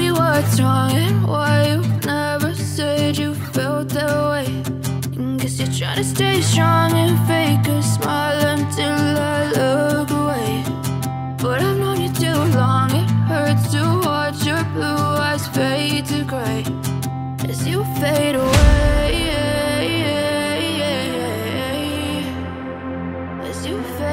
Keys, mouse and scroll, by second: 2.8 ctrl+z, 5.1 ctrl+shift+z, 6.6 shift+click, 19.4-21.6 drag.